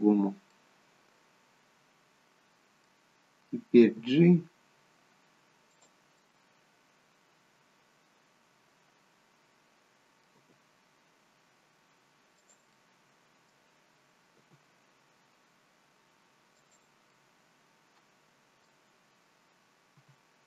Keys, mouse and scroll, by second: 0.6 middle click, 3.9 g, 6.2 middle click, 10.4 g, 12.8 middle click, 13.6 scroll down 3, 14.8 g, 17.1 middle click, 20.1 r.